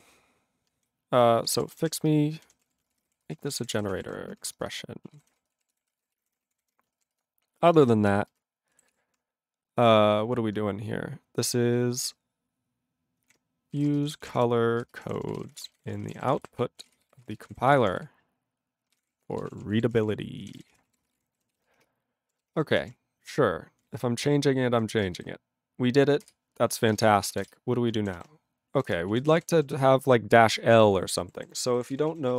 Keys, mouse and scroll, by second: 1.3-2.6 typing, 4.4-8.3 typing, 6.6 ctrl+o, 6.6 Tab, 9.0 ctrl+s, 9.8 ctrl+n, 10.2 ctrl+p, 13.3 u, 13.9 c, 14.1 c, 21.0 ctrl+a, 21.1 ctrl+e, 21.2 ctrl+g, 21.6 ctrl+s, 22.9 ctrl+a, 23.4-23.8 ctrl+p, 23.8-24.7 ctrl+n, 26.3 ctrl+Return, 26.7 ctrl+a, 26.8 ctrl+space, 26.9 ctrl+e, 27.0 ctrl+g, 27.5 Return, 29.0 ctrl+Return, 29.1 ctrl+a, 29.2 ctrl+space, 29.3 ctrl+e, 29.3 ctrl+g, 29.7 ctrl+s, 29.8-30.8 ctrl+p, 31.3 ctrl+=, 31.9 ctrl+s, 32.1 ctrl+a, 32.1 ctrl+n, 32.3 ctrl+space, 32.3 ctrl+e.